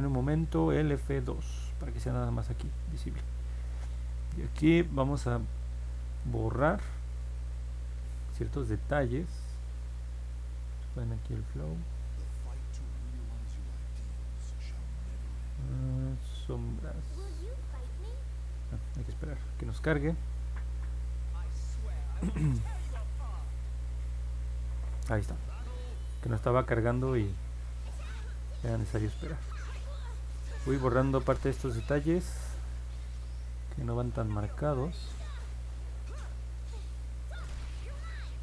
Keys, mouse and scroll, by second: 0.8 F2, 1.7-2.3 scroll up 4, 3.0 alt+middle click, 6.8 2, 11.5 click, 12.9 click, 13.7-15.6 drag, 16.5-17.8 drag, 26.6 click, 28.0 click, 28.7 click, 29.3 click, 30.0 click, 31.8 click, 33.7 click, 34.1 click, 34.6 click, 35.0 click, 35.5 click, 36.1 click, 36.7 click, 37.2 click, 37.7 click, 38.2 click.